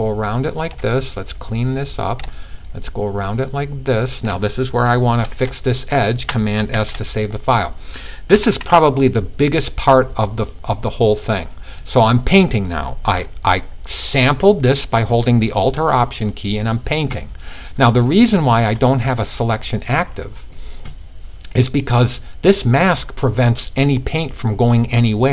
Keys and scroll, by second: 6.2 super+s, 7.8 ], 8.2 ].